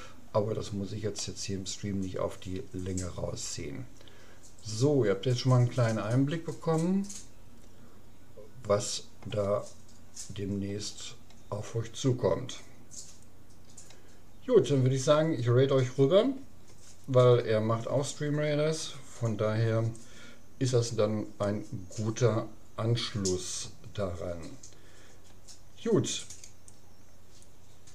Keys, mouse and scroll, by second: 0.3-2.9 middle drag, 10.1-11.9 middle drag.